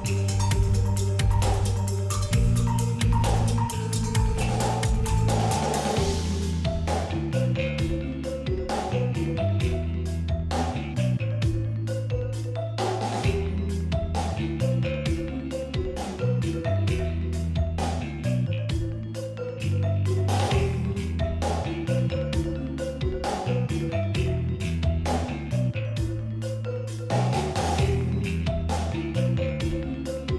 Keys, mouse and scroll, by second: 8.1-10.2 drag, 10.4 ctrl+z, 10.8-14.3 drag, 15.1-21.2 drag, 23.1 alt+scroll down 1, 23.7 space, 23.9 click, 24.3 space, 25.1 p, 26.2 click, 26.8 alt+scroll up 1, 26.8 click, 27.3 space, 27.5 click, 27.5 alt+scroll down 1, 27.7 click, 27.8 alt+scroll up 1, 27.9 click, 28.3 alt+scroll down 1, 28.4 click, 28.7 alt+scroll up 1, 28.8 alt+scroll down 1, 28.9 click, 28.9 right click, 29.0 click, 29.7 right click, 29.7-30.3 drag.